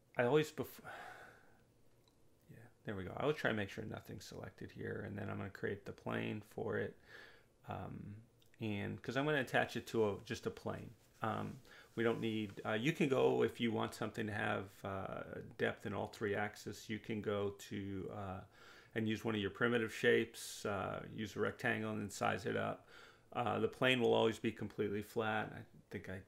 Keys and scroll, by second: 13.1 2, 13.6 0, 14.0 Return, 22.5 9, 22.8 Return.